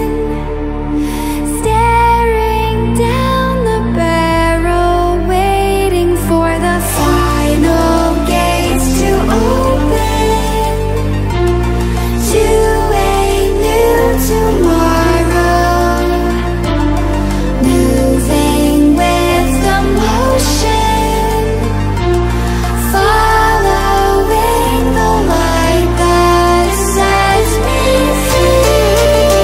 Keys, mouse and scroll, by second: 11.3 ctrl+z, 11.9-12.5 drag, 13.2 Delete, 13.8 click, 14.2 Delete, 14.8-15.7 click, 15.6 Delete, 16.2-16.8 click, 16.7 Delete, 17.4-18.2 drag, 18.8 Delete, 19.3 click, 19.8 Delete, 20.3 click, 20.7 Delete, 21.5 click, 21.7 Delete, 22.7 click, 23.0 Delete, 23.9 click, 24.2 Delete, 26.0-29.4 drag.